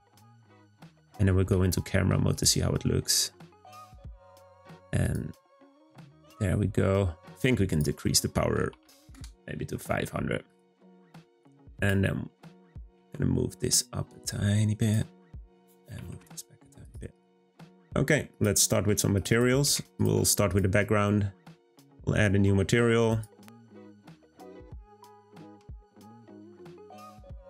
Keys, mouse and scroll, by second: 3.0 scroll up 2, 3.5 g, 7.6-9.0 drag, 9.0 0, 10.4 click, 11.8 click, 12.3 scroll down 2, 12.8 g, 15.6 click, 15.8 g, 17.1 click, 19.9 click, 20.4 click, 21.8 click, 23.1-26.8 drag.